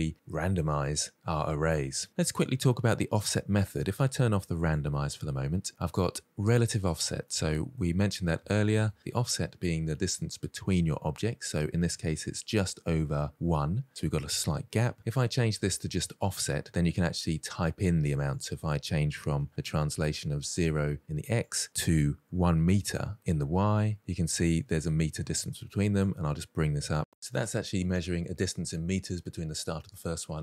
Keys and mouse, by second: 7.1-7.5 middle drag, 8.2 shift+middle drag, 16.1 click, 18.2-19.9 drag, 21.3-22.9 drag, 25.9-27.4 drag.